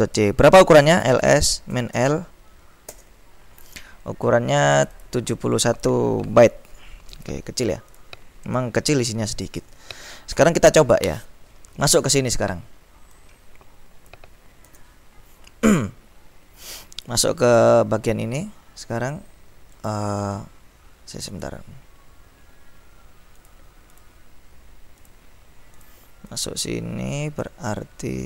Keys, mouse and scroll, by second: 0.8-2.1 typing, 3.0 Return, 4.8-5.7 scroll up 2, 7.3-8.0 scroll up 2, 10.4 ctrl+l, 13.3-14.6 drag, 14.7 ctrl+b, 17.1-18.2 drag, 19.8-20.5 scroll up 1, 21.4 click, 23.5 click, 25.3 click, 25.8 click.